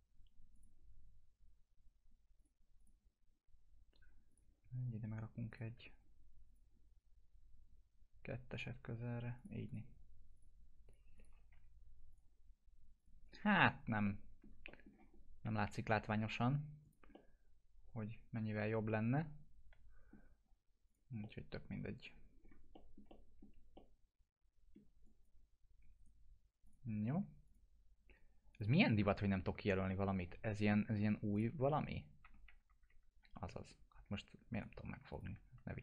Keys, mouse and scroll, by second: 0.5 click, 5.5 shift+click, 6.5 click, 11.5 F4, 12.1 click, 13.5 scroll down 1, 14.0-14.7 alt+middle click, 15.1 scroll up 1, 16.8 click, 17.1-20.3 alt+middle drag, 20.4 scroll down 1, 20.9 click, 21.2-22.2 alt+middle click, 22.4-22.7 scroll up 1, 22.7 middle click, 23.1-23.7 alt+middle drag, 25.0 click, 26.0 right click, 26.6 click, 29.3 scroll down 1, 31.3 scroll up 1, 31.3 click, 31.6 scroll down 1, 34.5 right click, 35.1 ctrl+click.